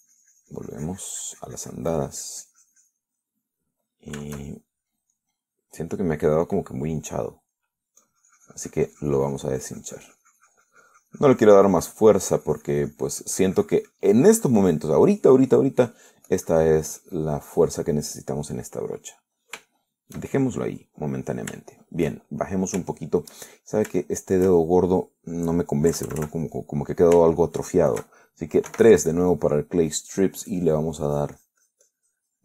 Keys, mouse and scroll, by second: 0.0 s, 0.2-4.4 drag, 4.5 middle click, 5.5-7.3 shift+middle drag, 7.7 middle click, 8.8 middle click, 9.3-17.0 drag, 17.1 middle click, 17.6-19.2 drag, 19.2 middle click, 20.1 middle click, 20.9 shift+middle click, 21.6 shift+middle click, 22.2 middle click, 22.8 shift+middle click, 23.5 shift+click, 24.2 shift+click, 24.7-26.4 shift+drag, 26.6 click, 27.2 KP_Add, 27.8 middle click, 28.5 shift+middle click, 29.9 3, 31.0-32.3 drag.